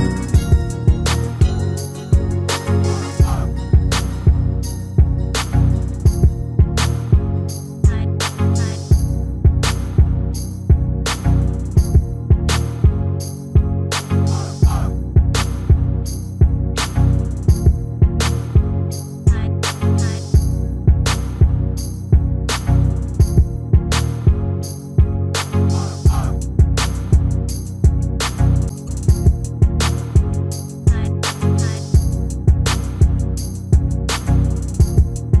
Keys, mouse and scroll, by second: 2.1 ctrl+r, 4.7 ctrl+r, 7.7 ctrl+r, 10.7 ctrl+r, 14.2 ctrl+r, 16.7-22.9 middle drag, 21.9 ctrl+r, 26.0 ctrl+r, 30.4-32.2 middle drag, 32.5-35.4 middle drag.